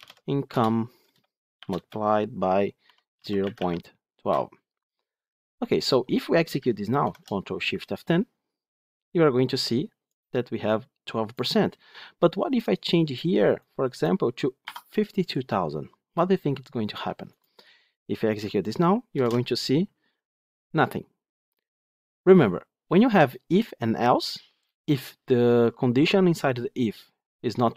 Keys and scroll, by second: 0.4 Return, 6.9 ctrl+shift+F10, 19.0 ctrl+shift+F10.